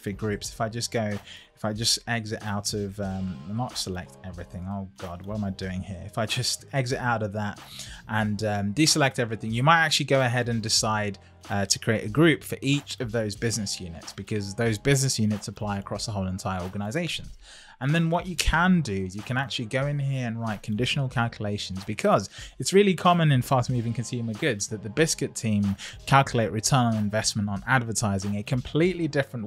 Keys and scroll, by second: 0.2 Escape, 2.0 super+a, 3.6 super+a.